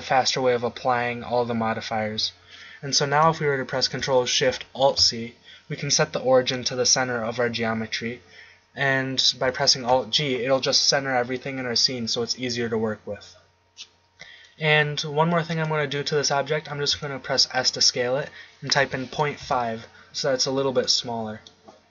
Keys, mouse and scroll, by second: 4.7 ctrl+alt+shift+c, 9.8 alt+g, 15.8-17.5 drag, 16.9 s, 21.1-21.9 middle drag.